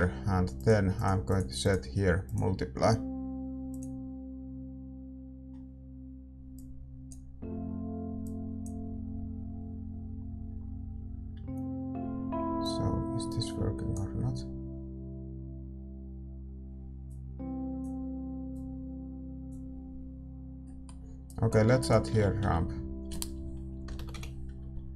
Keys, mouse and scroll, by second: 0.0-3.7 middle drag, 4.5-6.5 middle drag, 6.5-10.1 drag, 10.1-13.9 middle drag, 13.9-20.7 drag, 20.7-24.9 middle drag.